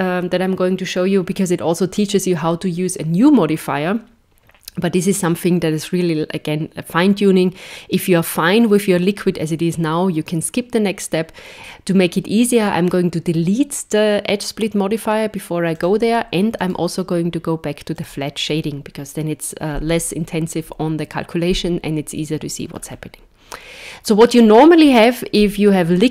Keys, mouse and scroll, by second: 15.8 click, 16.6 right click, 22.7-24.8 scroll down 3, 24.8 KP_1, 25.8 scroll up 4.